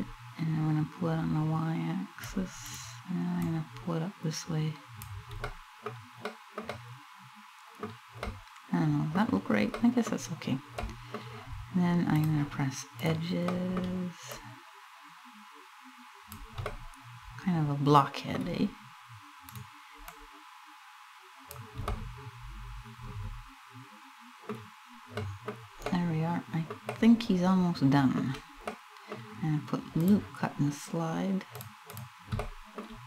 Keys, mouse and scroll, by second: 2.3 right click, 3.0 click, 4.3 click, 5.1 middle click, 5.9 middle click, 6.3 middle click, 7.9 middle click, 9.4 middle click, 10.6 middle click, 11.8 click, 12.7 right click, 13.2 middle click, 14.0 click, 16.3 middle click, 19.1 right click, 19.7 click, 21.5 middle click, 22.4 middle click, 24.3 scroll up 2, 24.8 middle click, 25.1 scroll down 2, 25.5 middle click, 26.2 middle click, 26.4 middle click, 28.4 middle click, 29.7 click, 32.1 middle click, 32.8 right click.